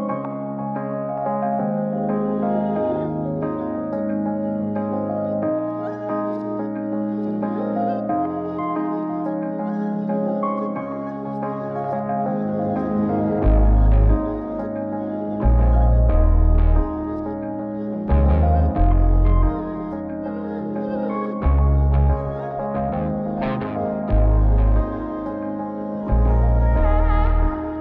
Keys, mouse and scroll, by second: 0.9 click, 3.3-4.9 drag, 5.2-7.0 drag, 7.8 F4, 20.3 scroll down 2, 21.0 shift+a, 27.7-27.8 scroll up 1.